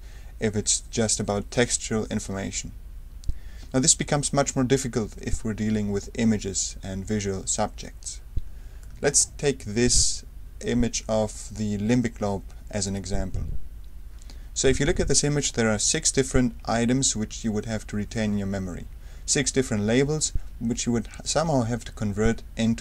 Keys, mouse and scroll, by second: 3.6 d, 8.8-10.4 super+drag, 12.8 click.